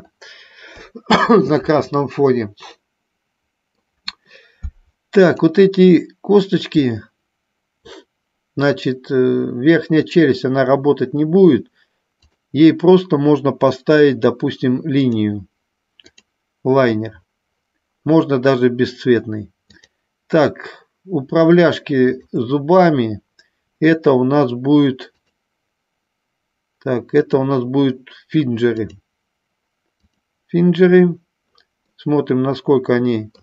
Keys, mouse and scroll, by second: 3.0-4.1 middle drag, 5.4 click, 12.4-15.4 drag, 16.2 click, 20.0 click, 22.4 shift+click, 25.4 click, 27.4-29.2 drag, 30.1 click, 32.1-33.4 middle drag.